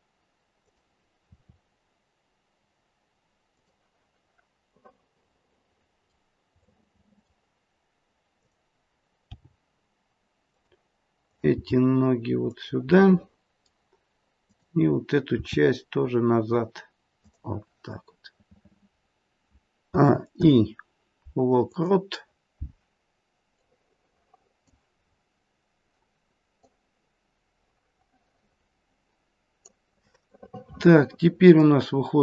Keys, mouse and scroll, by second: 1.3 r, 4.8 middle click, 6.6 middle click, 7.0 middle click, 8.3 middle click, 8.3 click, 9.2 g, 11.2 click, 11.8 g, 13.0 middle click, 14.4 click, 15.3 r, 19.9 a, 20.3 i, 23.6 click, 25.0-25.7 scroll down 2, 26.6 click, 26.6-27.8 scroll down 2, 30.3 middle click.